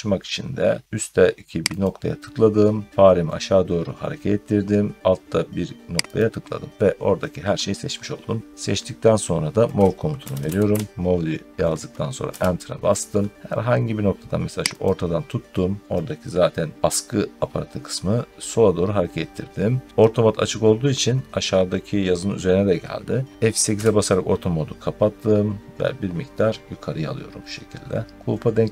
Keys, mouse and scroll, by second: 1.7 click, 6.0 click, 9.8-11.0 typing, 12.1 Return, 14.7 click, 15.0 typing, 16.7 middle click, 23.6 F8.